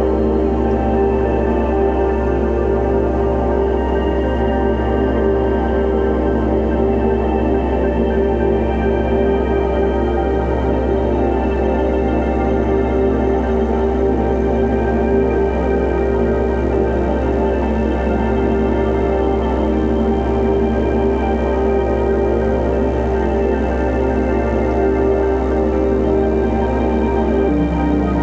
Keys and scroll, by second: 1.2-2.8 typing, 4.8 t, 5.0 o, 5.6 r, 5.6 u, 6.6 ctrl+a, 13.7 shift+g, 15.3 shift+s, 15.7 shift+s, 18.6 ctrl+a.